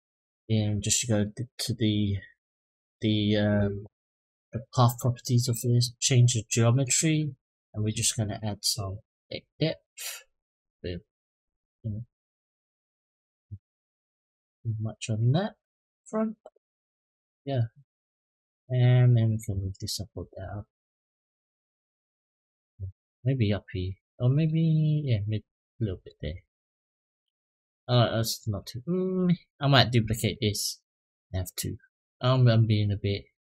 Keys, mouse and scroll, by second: 0.2 click, 5.5 click, 6.2 middle click, 9.3-15.3 drag, 16.5 click, 16.9 middle click, 17.9 click, 18.7-20.0 drag, 20.2 click, 20.6-21.8 middle drag, 22.3 click, 23.0-25.8 drag, 26.2 click, 26.6-28.3 middle drag, 28.9 click, 30.1 shift+d, 30.8-33.5 drag.